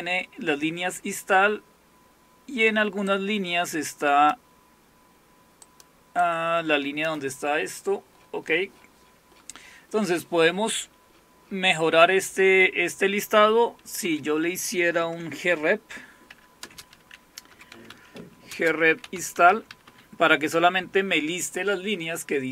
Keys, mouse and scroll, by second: 3.1-5.2 drag, 5.7-8.0 drag, 8.0-9.2 scroll down 1, 9.2-10.9 scroll down 1, 10.9-14.1 scroll down 1, 14.1-15.0 scroll down 1, 15.0-16.3 scroll down 1, 16.3 End, 16.6-20.4 typing.